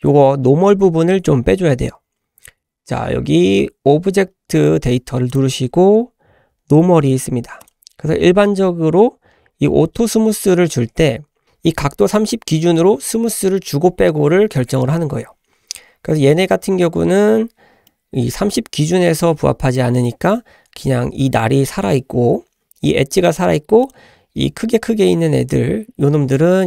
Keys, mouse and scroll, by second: 5.3 click, 7.7 click, 11.4 click, 17.9-20.2 middle drag, 23.9 drag, 25.6-26.3 scroll down 1, 26.3-26.6 middle drag.